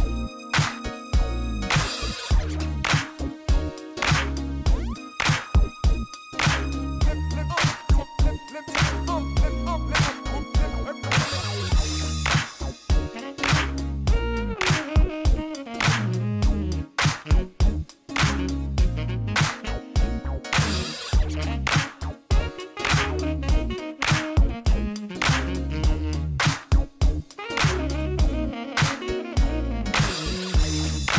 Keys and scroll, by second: 0.2 0, 4.7 b, 4.8 g, 5.4 Return, 13.1 3, 13.4 1, 13.9 shift+a, 14.7 Tab, 15.0 s, 15.8 1, 16.4 Tab, 16.9 g, 17.4 Tab, 17.7 s, 19.2 s, 19.3 y, 21.3 s, 21.7 y, 22.0 Tab, 24.7 3, 25.1 1, 25.7 Tab, 25.8 shift+z, 26.5 1, 27.0 Tab, 28.4 ctrl+r, 29.3 g, 30.2 g, 30.8 g.